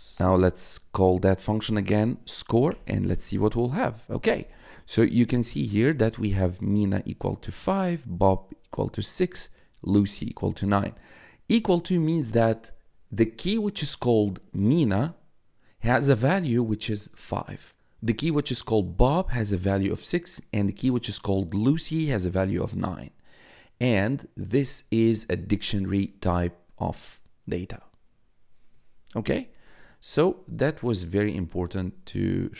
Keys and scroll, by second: 0.1 BackSpace, 0.2 Up, 2.6 Return, 6.9 1, 29.5 1.